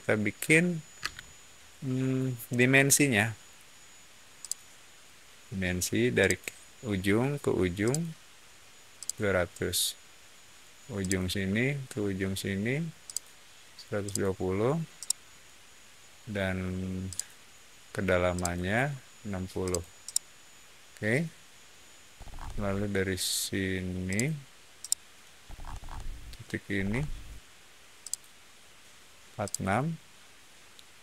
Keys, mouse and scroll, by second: 0.9 space, 4.3 click, 6.1 click, 7.8 click, 8.9 click, 10.9 click, 13.0 click, 14.0 click, 14.9 middle click, 17.0 click, 18.3 click, 19.5 click, 19.9-21.1 middle drag, 22.1 scroll up 1, 24.0 click, 24.7 middle click, 25.4-26.7 scroll up 2, 26.7 middle click, 27.9 click, 29.4 click.